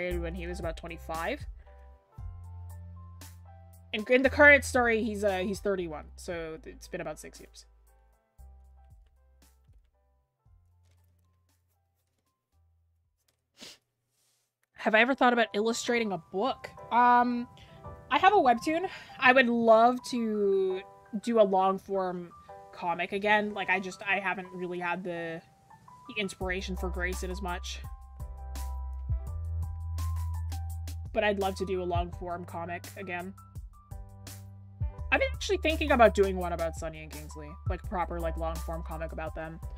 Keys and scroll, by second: 0.6-3.2 scroll down 1, 4.5-4.8 scroll up 1, 4.8 scroll, 5.4 scroll up 1.